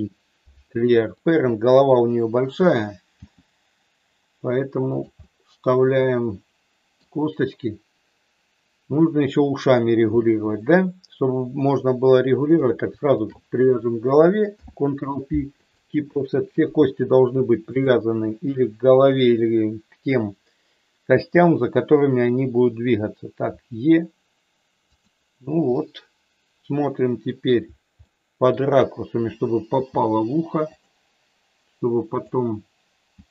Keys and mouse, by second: 3.3 g, 4.9 click, 5.1-7.0 middle drag, 13.1 shift+click, 14.5 ctrl+p, 17.8 click, 23.5 e, 24.8 click, 25.8-27.5 middle drag, 28.0 middle click, 29.6 g, 32.2 click, 33.0 g.